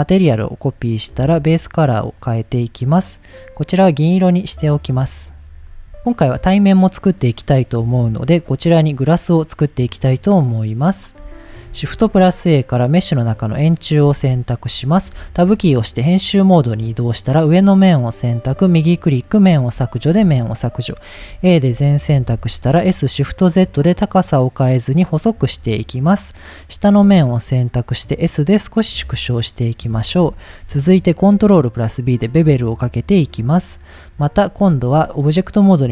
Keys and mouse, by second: 2.3 drag, 4.9 click, 11.1 click, 11.4 shift+middle click, 11.7 shift+a, 14.0 g, 14.1 z, 14.7 click, 15.1 Tab, 16.0 click, 16.5 click, 17.8-18.6 right drag, 18.9 middle click, 19.8 shift+middle click, 21.2 a, 21.7 s, 22.3 shift+z, 24.9 click, 25.2 middle click, 26.5 middle click, 27.0 s, 28.6 click, 29.2 middle click, 30.0 shift+middle click, 31.3 ctrl+b, 33.1 click, 34.6 Tab.